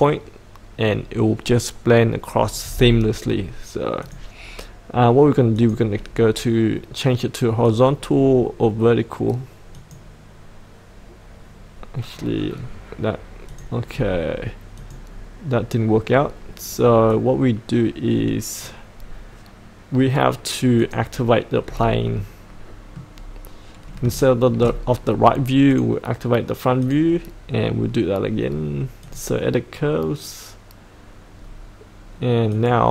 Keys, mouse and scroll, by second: 8.4-9.7 scroll down 1, 9.7 click, 12.2-13.5 scroll down 1, 13.5 click, 13.9-14.8 scroll up 1, 14.8-19.4 drag, 21.6-22.1 scroll up 1, 22.1 middle click, 23.1-24.0 scroll up 1, 24.1 shift+middle click, 25.7 click, 31.3-32.5 scroll down 1, 32.5-32.9 drag.